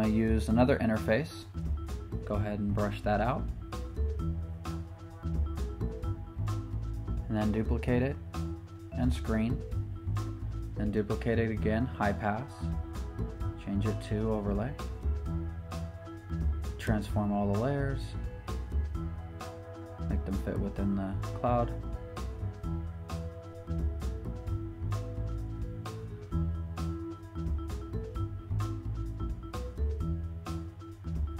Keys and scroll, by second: 8.2 super+j, 11.9 super+j, 17.2 super+t, 24.0 Return.